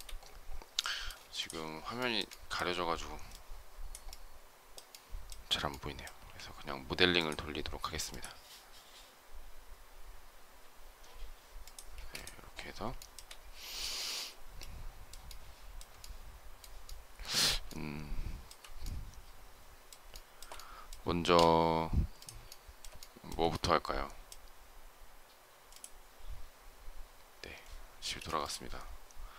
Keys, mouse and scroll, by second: 1.1 space, 1.8 shift+middle click, 11.8 space, 12.8 shift+middle click, 15.8 shift+middle click, 16.7 shift+middle click, 16.8 shift+scroll down 1, 17.3 shift+scroll up 1, 17.5 shift+scroll down 1, 18.3 shift+scroll up 1, 19.9 shift+middle click, 22.8 shift+middle click, 27.9 space.